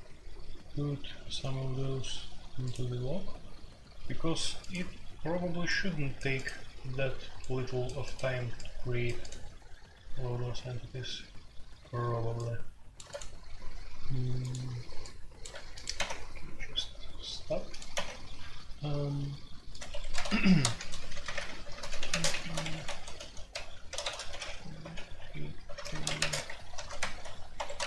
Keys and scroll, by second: 15.9 typing, 17.9 typing, 19.9 Escape, 20.1-27.8 typing, 20.4 Return.